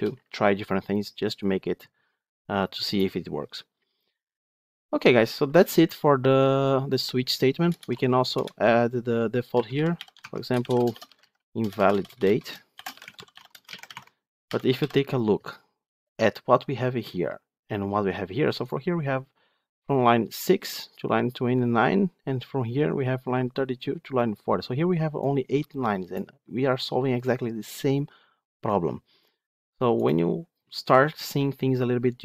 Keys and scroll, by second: 8.2 Return, 10.0 Tab.